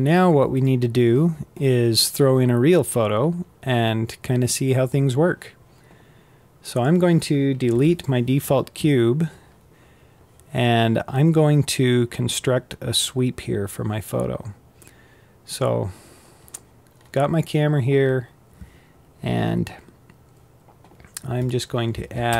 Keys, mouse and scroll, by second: 6.4 click, 7.2 Delete, 14.3-15.4 middle drag, 15.4-16.4 scroll down 7, 16.4-17.1 scroll up 5, 17.1 scroll down 5, 20.9-21.9 scroll down 5, 21.9 shift+a.